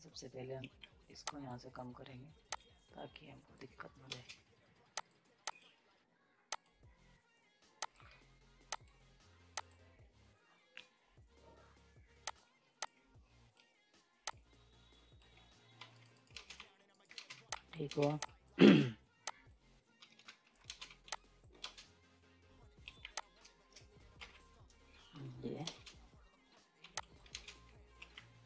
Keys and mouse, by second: 0.5 F10, 1.2-4.1 drag, 4.1 ctrl+space, 4.9 click, 12.2 click, 14.2-15.8 drag, 15.8-18.6 typing, 15.9 right click, 16.9 right click, 17.1 ctrl+space, 17.5 click, 18.2 click, 19.2 click, 19.9 ctrl+z, 20.5 right click, 20.5 right click, 20.6 ctrl+space, 20.8 z, 21.1 click, 21.6 ctrl+space, 22.9 F10, 23.2 click, 24.1 shift+Up, 25.6 space, 26.8 z, 27.0 click, 27.3 space, 27.9 F10.